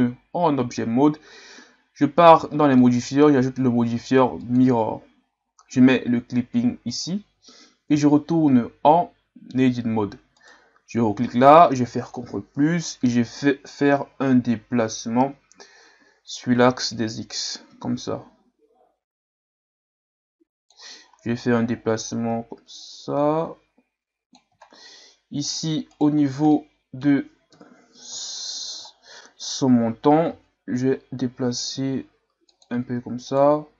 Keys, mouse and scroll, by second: 4.6 click, 6.9 click, 7.9 Tab, 8.5-10.4 scroll up 1, 10.4 right click, 12.1 ctrl+KP_Add, 17.4-20.4 drag, 21.3-24.5 drag, 24.7-25.3 scroll down 1, 25.3 scroll down 1, 25.5 right click, 25.9 right click, 26.5-27.5 middle drag, 27.5 KP_3, 28.4-28.9 scroll down 2, 29.0 scroll down 3, 30.3 g, 33.3 right click.